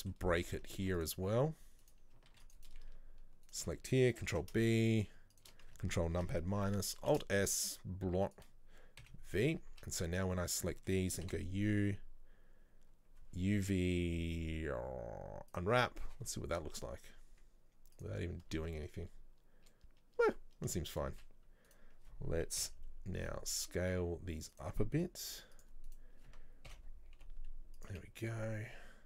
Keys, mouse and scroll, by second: 0.4-0.8 scroll up 2, 0.8 ctrl+r, 2.4 ctrl+r, 3.6 alt+shift+right click, 4.4 ctrl+b, 6.2 ctrl+KP_Subtract, 7.2 alt+s, 9.1 v, 9.6 scroll down 1, 9.8 a, 10.1 middle click, 10.3-10.7 scroll down 1, 10.7-15.7 middle drag.